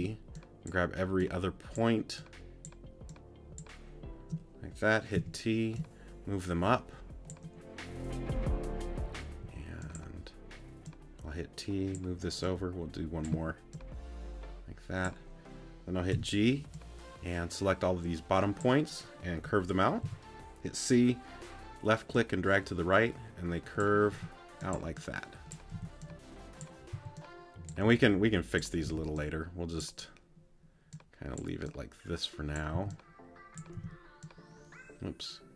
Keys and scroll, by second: 9.4 t, 13.3 a, 16.1 g, 20.0 c, 24.1 t, 25.7 t, 26.9 c, 32.7 c.